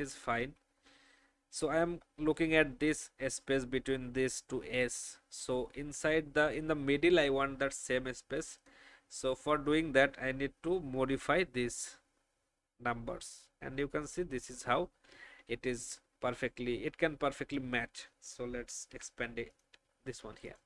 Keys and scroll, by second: 0.4 shift+Up, 15.7 shift+Down, 16.5 Up, 16.8 Up, 17.0 Up, 17.2 Up, 18.0 c.